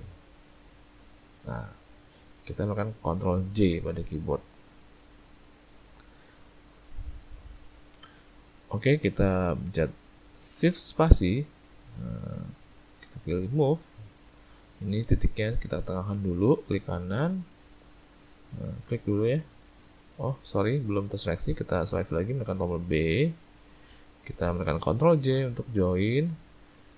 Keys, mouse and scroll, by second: 3.4 ctrl+j, 11.0 shift+space, 16.3 right click, 18.7 click, 19.2 right click, 20.0 click, 20.7 click, 21.8 click, 22.6 b, 25.2 ctrl+j.